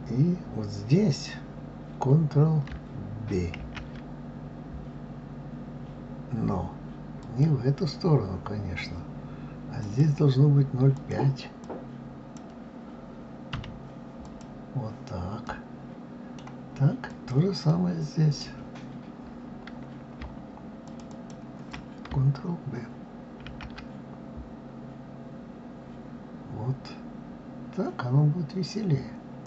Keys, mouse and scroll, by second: 3.6 ctrl+b, 9.8-12.8 drag, 15.4-17.1 middle drag, 17.1 click, 17.7-20.7 middle drag, 20.9 shift+click, 21.1 shift+click, 23.4 ctrl+b.